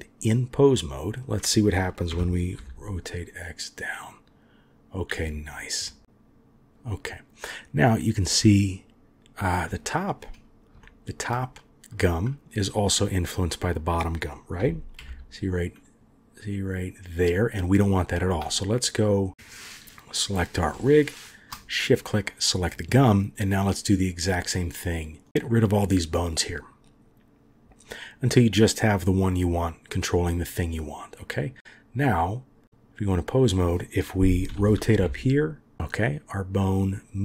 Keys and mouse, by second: 0.7-2.1 drag, 2.1 r, 6.0 r, 9.7 click, 10.8-11.2 shift+drag, 13.2-14.6 drag, 14.6 r, 19.4 click, 21.2 shift+click, 31.3-32.6 drag, 34.5 r.